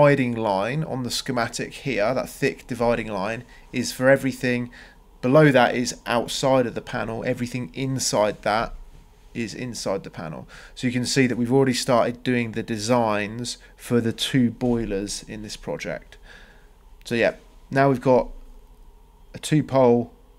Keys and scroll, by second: 4.8 Escape, 6.0 Delete, 10.1 c, 10.5 Return, 17.0 Escape.